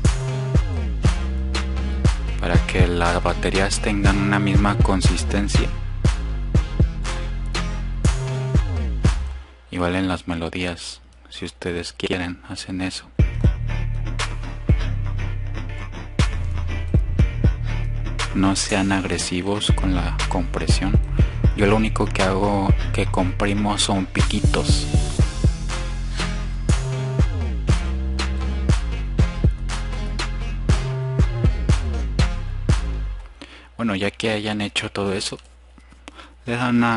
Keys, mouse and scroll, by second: 0.9-2.0 drag, 3.6 click, 16.2 click, 17.5 click, 18.9 click, 20.6 drag, 21.3 click, 31.6 click.